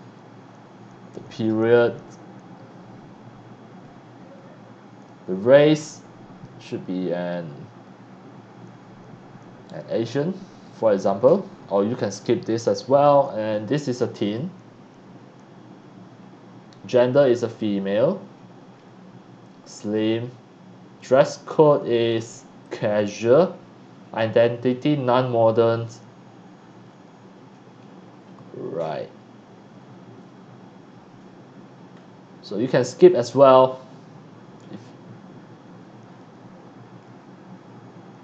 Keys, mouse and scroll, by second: 4.0-4.6 middle drag, 4.0-4.6 scroll down 1, 12.6 middle click, 14.2 click, 17.4 click, 18.7 middle click, 18.7 scroll down 1, 19.8-20.7 drag, 22.6 click, 27.8-28.7 scroll down 2, 31.9 scroll down 1, 34.6 middle click, 34.6 scroll down 1, 36.0 middle click, 36.0 scroll down 1, 37.0 middle click, 37.0 scroll down 1.